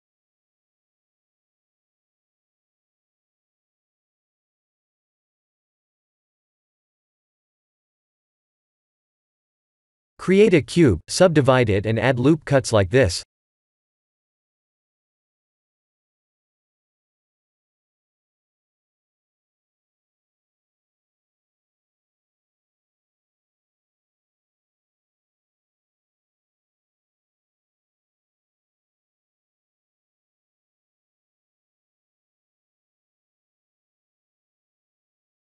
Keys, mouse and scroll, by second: 0.4 s, 2.3 click, 5.1 click, 5.4 middle click, 8.5 click, 8.7 right click, 9.7 click, 10.3 shift+a, 13.5 KP_1, 14.8 click, 16.6 shift+z, 17.6 click, 18.7 s, 21.2 s, 24.6 middle click, 28.6 s, 31.1 KP_1, 31.6 KP_3, 33.3 s.